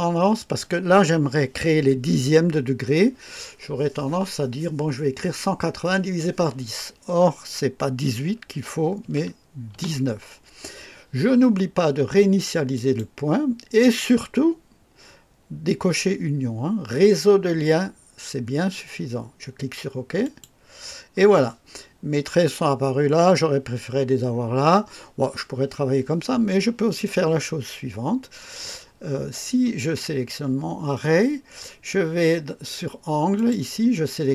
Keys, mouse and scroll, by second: 9.0 KP_1, 9.7 KP_9, 12.7 click, 20.2 click, 28.9-29.4 scroll down 2, 31.1-31.5 scroll down 1, 33.3 click.